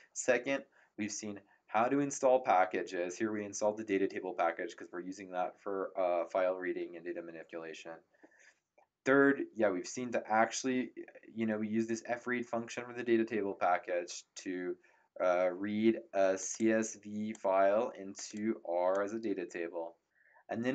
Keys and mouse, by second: 16.4 click, 18.1 click.